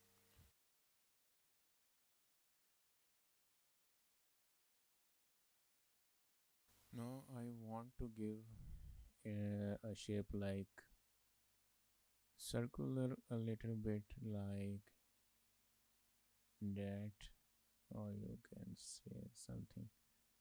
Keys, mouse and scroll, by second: 6.6 shift+middle click, 8.2 click, 8.7 click, 12.5 click, 17.4 ctrl+z, 18.3 click, 20.0 ctrl+z.